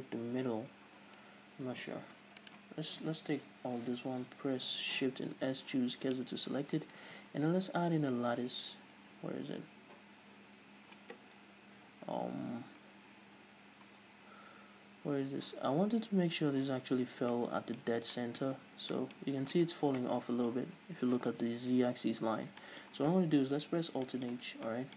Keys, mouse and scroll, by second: 0.4-0.8 scroll down 1, 1.9-2.6 scroll up 1, 2.6 right click, 3.2 Tab, 3.6 a, 5.5 shift+s, 6.7 scroll down 1, 7.3 shift+a, 13.9 scroll up 1, 17.5-24.9 middle drag, 18.0 scroll up 2, 18.2 scroll down 2, 18.8 Tab, 19.4-20.2 scroll up 2, 20.2 KP_1, 20.7-22.2 scroll up 2, 22.2-22.8 scroll down 2, 23.8 alt+h, 24.6 scroll down 2.